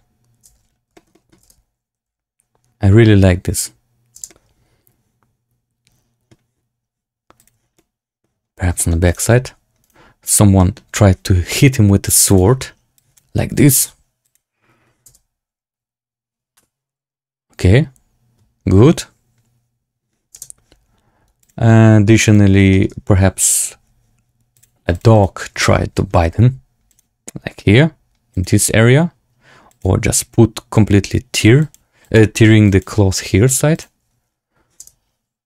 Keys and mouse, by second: 0.4 space, 0.9 shift+middle drag, 1.0 click, 1.3 space, 2.1 z, 4.1 space, 4.2-6.2 drag, 7.3 click, 7.7-8.1 middle drag, 8.7 shift+middle drag, 9.0 drag, 9.2 z, 9.7 click, 10.5 middle drag, 12.2 click, 15.0 space, 20.2 space, 22.2-22.5 drag, 22.6 shift+middle click, 24.5 click, 25.2 click, 25.5 shift+middle click, 25.8 middle click, 26.8 click, 28.2 click, 29.6 click, 30.6 click, 31.5 click, 31.9 click, 32.6 click, 34.7 space.